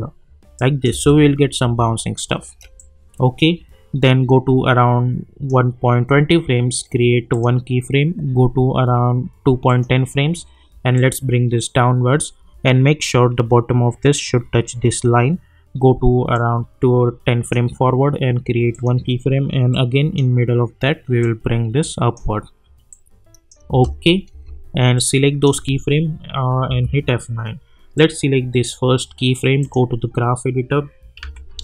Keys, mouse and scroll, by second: 0.9 space, 2.7-7.3 drag, 9.6-23.7 drag, 23.7 space, 24.9-26.7 drag, 26.7 F9, 27.9-29.6 drag, 31.2 =, 31.5 =.